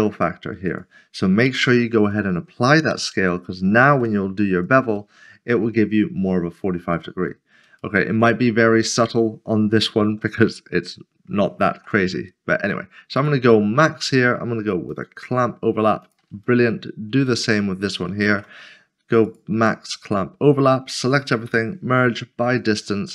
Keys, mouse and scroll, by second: 0.0 click, 1.5 ctrl+a, 2.1 click, 2.9 Tab, 3.9 ctrl+b, 4.7 click, 5.2 middle click, 8.0 shift+middle click, 9.8 ctrl+z, 10.4 ctrl+middle click, 11.7 ctrl+b, 13.2 click, 16.5 middle click, 19.3 click, 19.7 middle click, 20.9-21.5 typing, 22.0 click.